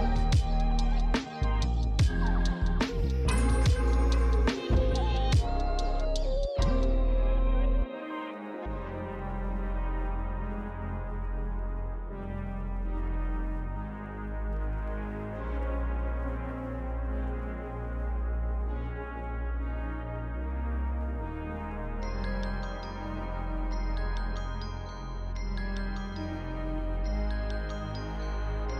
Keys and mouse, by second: 0.4 shift+a, 0.6 click, 1.6 s, 1.9 click, 2.1 s, 2.2 click, 2.7 click, 2.9 s, 3.1 click, 6.7 click, 6.8-7.6 typing, 7.6 click, 10.3 click, 12.1 s, 12.6 click, 12.8 s, 13.0 click, 13.1 s, 13.5 click, 14.3 click, 14.7-17.4 typing, 14.8 click, 15.6 click, 15.9 click, 16.7 click, 17.0 click, 17.5 click, 18.5 click, 19.8-22.6 typing, 19.9 click, 20.4 click, 21.2 click, 22.1 click, 22.7 click.